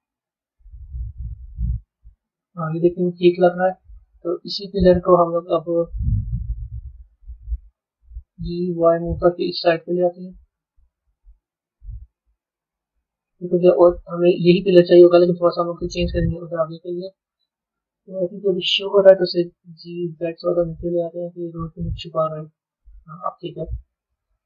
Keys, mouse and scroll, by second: 0.8 g, 3.1-4.9 middle drag, 4.9 scroll down 2, 6.0 KP_3, 7.4 g, 12.7-15.7 middle drag, 16.6-19.5 middle drag, 19.5 g, 22.1 a, 23.3-24.4 middle drag.